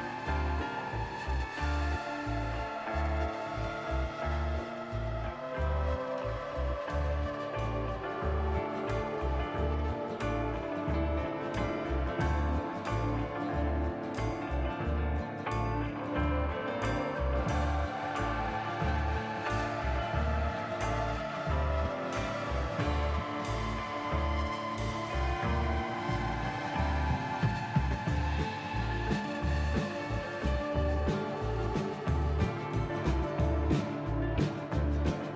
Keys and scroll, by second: 16.1 n, 26.5 ctrl+z, 28.5 n, 33.3 Tab.